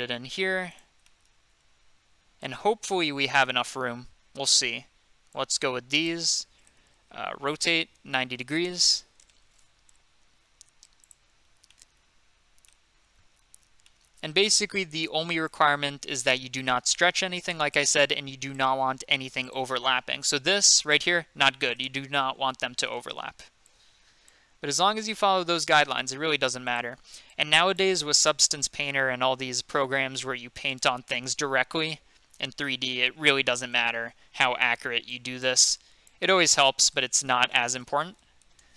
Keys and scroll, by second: 7.4-8.7 typing, 10.2 typing, 11.8 typing, 13.6 typing, 15.9 g, 18.8 g, 20.1 g, 22.2 ctrl+z, 24.8 g, 28.1 g, 37.2-38.7 typing.